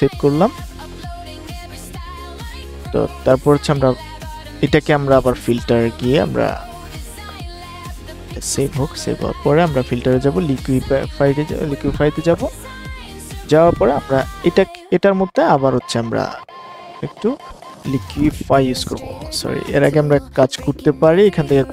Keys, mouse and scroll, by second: 4.8-19.6 drag.